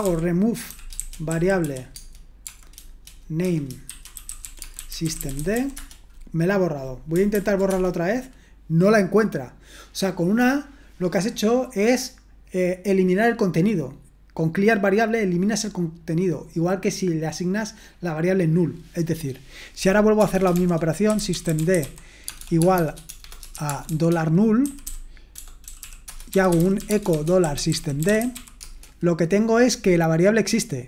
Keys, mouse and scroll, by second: 0.0-6.0 typing, 7.3 ctrl+p, 7.7 Return, 19.8-29.1 typing.